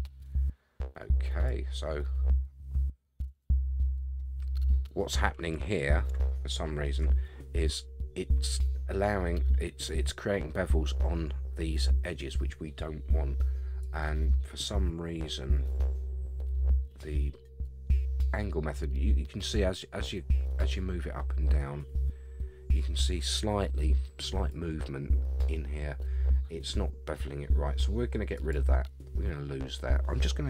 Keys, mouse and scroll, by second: 4.2-4.5 middle drag, 4.7-5.2 scroll down 3, 5.2-6.1 scroll up 6, 6.4-7.0 shift+middle drag, 13.8-24.5 drag, 28.3 click.